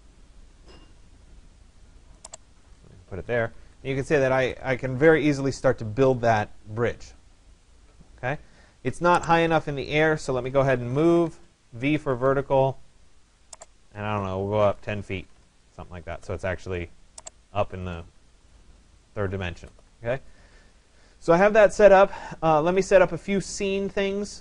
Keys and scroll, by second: 2.9 Escape, 10.9 Return, 14.8 0, 15.4 Return.